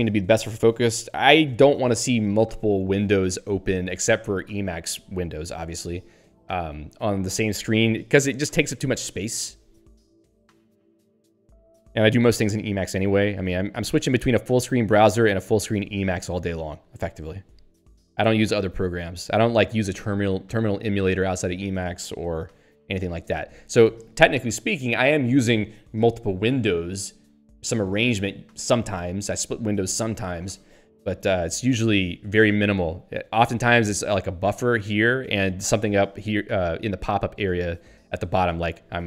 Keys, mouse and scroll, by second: 14.8 ctrl+g, 16.4 ctrl+g, 34.0 click, 34.4 click, 36.5 ctrl+alt+'.